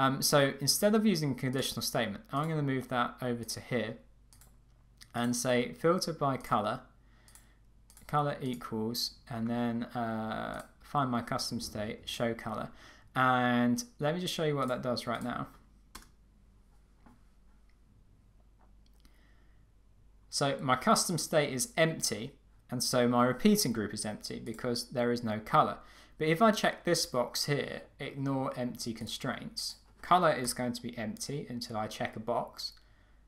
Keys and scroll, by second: 16.0 Return, 30.4 Return.